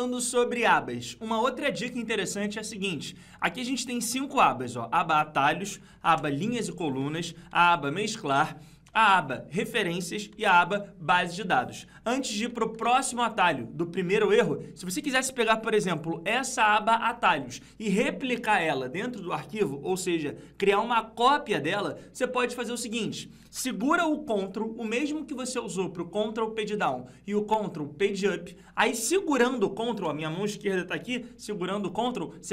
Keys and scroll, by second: 6.0 ctrl+Page_Down, 12.0 ctrl+Page_Up.